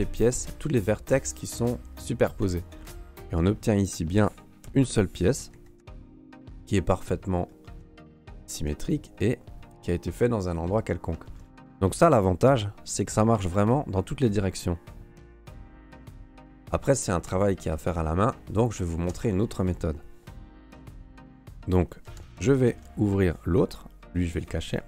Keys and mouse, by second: 3.8 right click, 4.6 l, 5.5 a, 5.8 Tab, 7.5 middle click, 7.8 Tab, 8.5 Tab, 8.8-9.8 middle drag, 11.2 shift+drag, 16.2 Tab, 19.1 Tab, 22.0 alt+h, 22.6 shift+middle click, 23.0 right click, 24.0 h, 24.7 right click.